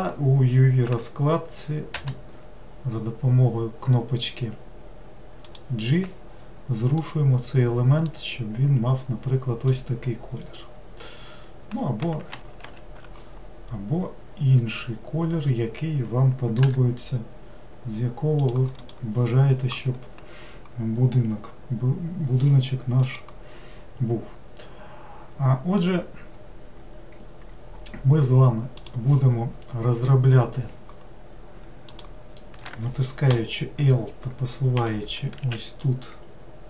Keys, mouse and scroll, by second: 2.0 g, 7.0 click, 8.1-11.2 middle drag, 12.6 ctrl+z, 16.6 g, 18.8 click, 31.9 click, 33.3 l, 34.8 g.